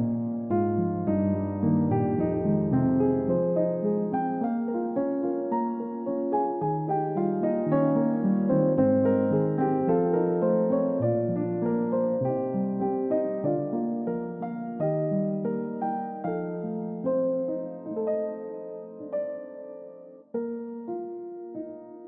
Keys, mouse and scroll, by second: 2.2 scroll up 1, 2.5 alt+click, 3.2 scroll up 1, 3.5 middle click, 3.8-4.1 scroll up 1, 4.1 double click, 7.7 typing, 10.0-10.8 typing, 11.9 scroll up 1, 13.1 scroll down 1, 13.6 middle click, 17.3 middle click, 20.7 space.